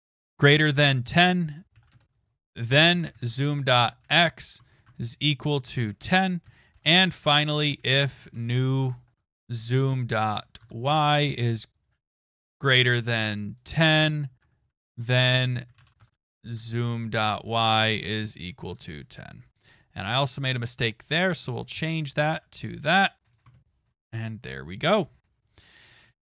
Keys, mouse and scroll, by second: 0.6-9.0 typing, 13.4-17.2 typing, 21.5-22.2 typing, 24.2 click, 25.9 click, 25.9 scroll up 2, 26.1 ctrl+s.